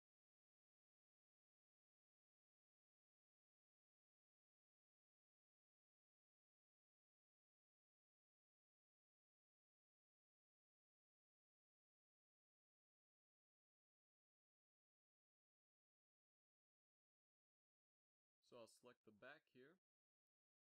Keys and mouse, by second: 0.2 a, 1.1 KP_1, 1.6 z, 3.1 b, 5.5 g, 8.0 Tab, 8.4 a, 8.7 z, 11.2 KP_5, 17.2 KP_3, 17.6 Tab, 18.4 KP_5, 18.9 z, 19.2 middle click, 19.5 a, 19.8 b.